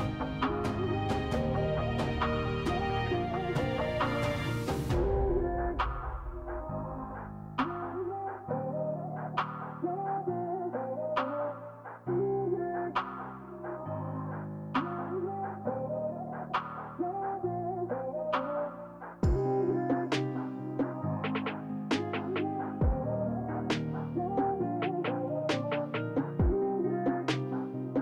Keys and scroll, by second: 4.0 2, 5.3 s, 9.5 s, 18.3 s, 21.3 s, 22.5 s, 24.2 alt+e, 25.6-27.6 typing.